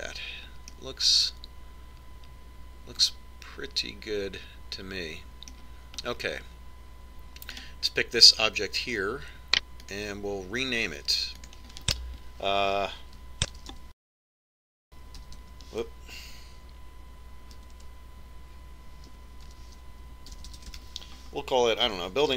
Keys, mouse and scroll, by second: 2.7-4.5 middle drag, 8.2-9.8 middle drag, 9.5-11.2 right drag, 11.9-15.2 drag, 15.3-18.8 drag, 18.8 BackSpace.